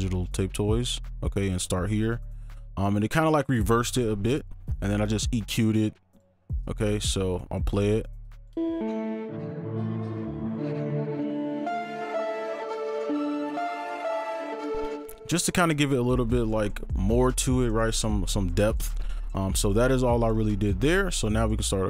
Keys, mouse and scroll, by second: 8.5 space, 14.9 space.